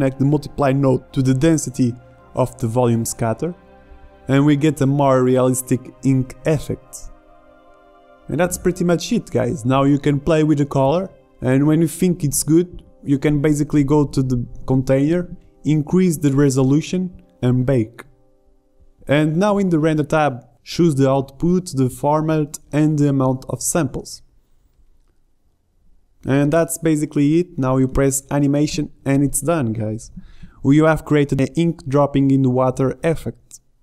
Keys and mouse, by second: 4.8 click.